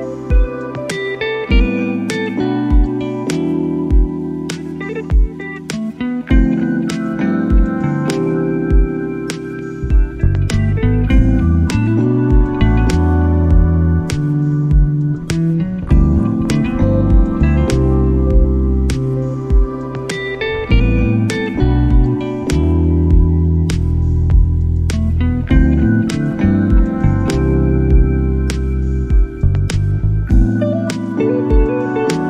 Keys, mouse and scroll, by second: 1.9-4.0 drag, 4.2 click, 6.7 middle click, 8.3-10.7 drag, 11.7-12.7 drag, 13.0 middle click, 17.3 shift+a, 23.1 click, 23.3 click, 23.8-24.3 drag, 24.6-25.1 drag, 26.6 click, 28.0 middle click, 28.6-30.1 drag.